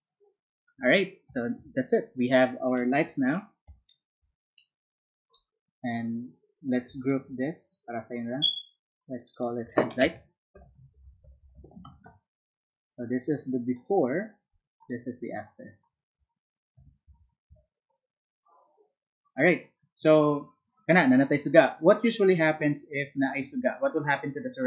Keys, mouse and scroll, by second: 0.0 click, 7.0 shift+click, 8.1 shift+click, 9.2 shift+click, 9.3 shift+click, 10.4-12.2 typing, 13.7 click, 14.8 click.